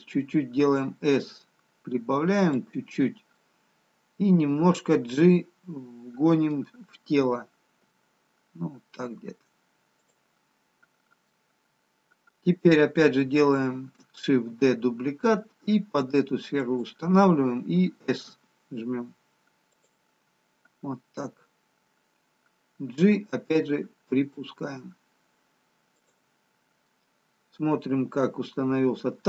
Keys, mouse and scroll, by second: 1.4 s, 3.7 middle click, 8.7 g, 10.7 scroll down 1, 11.9 middle click, 15.6 shift+d, 18.3 s, 23.4 g, 26.9 middle click.